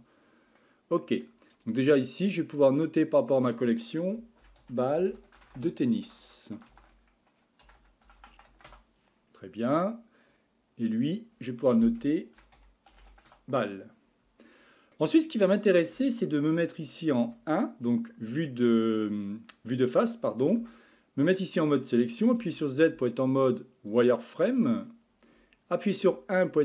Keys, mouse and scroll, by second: 0.6-3.0 middle drag, 3.0 click, 3.2-5.1 drag, 5.1 l, 6.2 BackSpace, 8.2 n, 10.9 click, 11.1-13.0 drag, 13.0 l, 15.0-17.3 middle drag, 17.3 KP_1, 18.5-19.0 scroll up 3, 19.0-20.1 scroll down 1, 20.6 Tab, 22.4 z, 24.7-26.0 scroll down 2, 26.0 1.